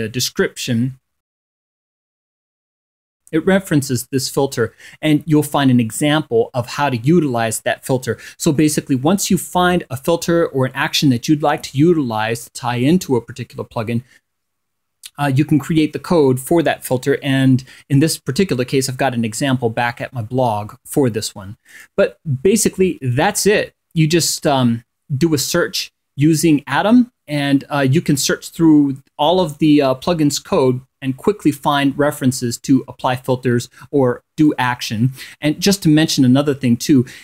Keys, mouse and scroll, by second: 3.4 click, 22.5 click, 25.1 click, 28.2-28.7 scroll up 2, 28.7-29.2 scroll down 2, 29.4-29.8 scroll up 2, 35.5 click.